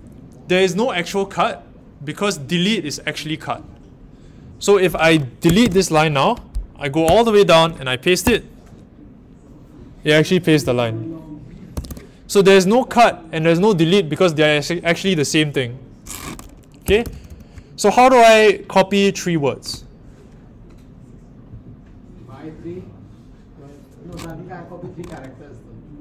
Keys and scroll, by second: 5.4 typing, 7.0-8.7 typing, 16.5-18.4 typing.